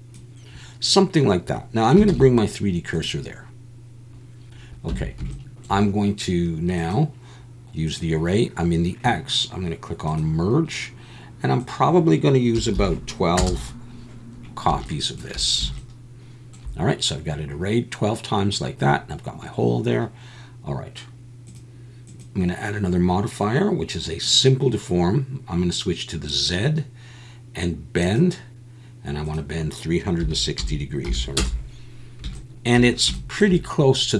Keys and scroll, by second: 2.1 shift+s, 4.9 Tab.